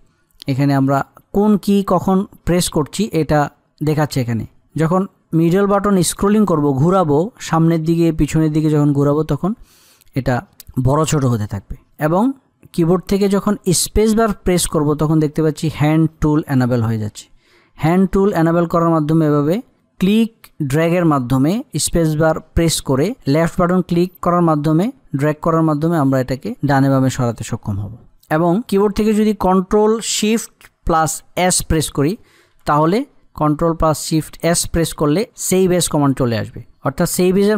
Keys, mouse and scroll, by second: 4.2 alt+scroll down 1, 4.5 alt+scroll up 1, 4.8-5.3 alt+scroll down 1, 5.4 alt+scroll up 1, 5.9-6.5 alt+scroll down 1, 6.7 alt+scroll up 1, 7.7 alt+scroll down 1, 8.9-9.6 alt+scroll up 1, 9.6 alt+scroll down 1, 10.9-11.5 alt+scroll up 1, 12.1-13.0 alt+scroll down 1, 13.5 space, 33.1 ctrl+Num_Lock, 34.0 ctrl+shift+s, 34.9-36.4 drag, 36.8 click.